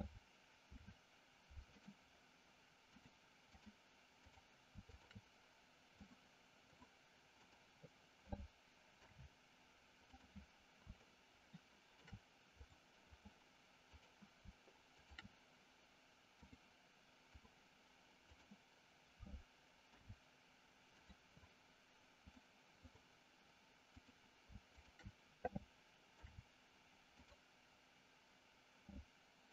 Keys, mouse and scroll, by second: 0.5 ctrl+p, 3.0 click, 4.3 click, 4.9 shift+click, 6.0 click, 7.4 click, 8.9 ctrl+p, 11.0-12.0 shift+middle drag, 12.4 click, 16.5 click, 18.3 click, 19.8 ctrl+p, 22.3 click, 23.9 click, 24.8 shift+click, 26.0 ctrl+p.